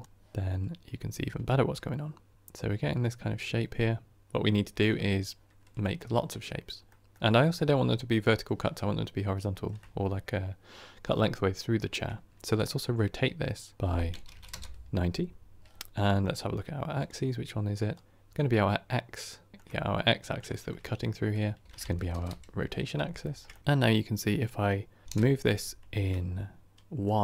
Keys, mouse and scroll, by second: 12.4 click, 14.4-17.2 drag, 17.9 click, 19.6-21.6 middle drag, 21.6 click, 22.1 Tab, 23.1-25.0 shift+middle drag, 25.0-27.2 drag.